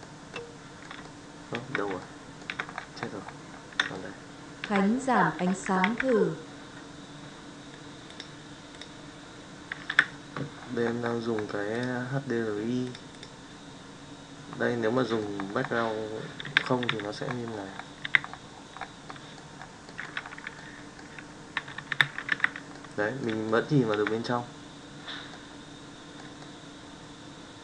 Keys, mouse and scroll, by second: 1.0-1.6 middle drag, 1.9-2.5 shift+middle drag, 3.9-4.6 shift+middle drag, 5.8 alt+a, 8.7-9.9 drag, 12.8-13.5 drag, 14.9-15.3 middle drag, 16.4 KP_Decimal, 16.8 KP_5, 18.0 KP_Decimal, 19.1 middle drag, 19.8 middle drag, 20.5-21.0 middle drag, 21.8 KP_5, 22.2 alt+a, 22.7-23.2 middle drag, 23.4-24.0 shift+middle drag, 25.3-26.2 middle drag, 26.4-27.6 shift+middle drag.